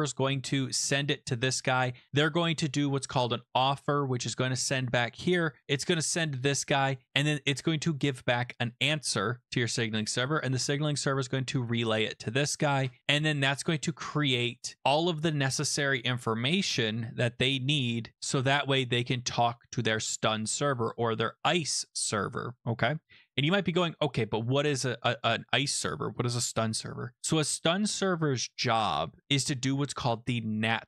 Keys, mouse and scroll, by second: 0.7 click, 4.6 click, 6.4 click, 9.4 click, 11.6 click, 19.9 click.